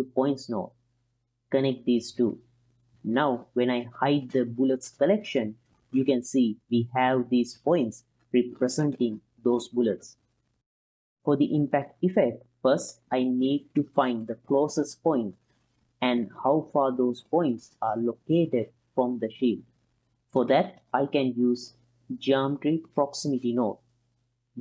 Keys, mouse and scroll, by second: 1.9-2.7 drag, 3.0-3.4 drag, 3.6 middle drag, 4.4 alt+shift+click, 6.3 click, 7.5-9.2 middle drag, 9.9 ctrl+middle click, 11.6 click, 12.1 click, 12.6 middle drag, 13.7 alt+shift+click, 14.6 alt+shift+click, 16.1-16.6 middle drag, 17.2 click, 17.9 middle click, 20.1-24.2 drag, 24.2 middle click.